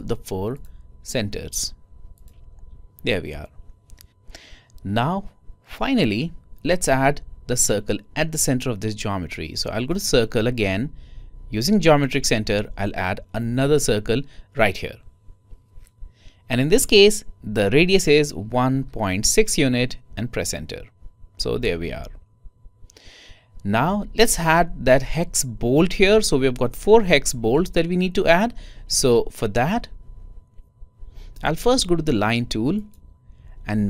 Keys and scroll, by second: 19.2-20.6 typing, 22.5-23.2 typing.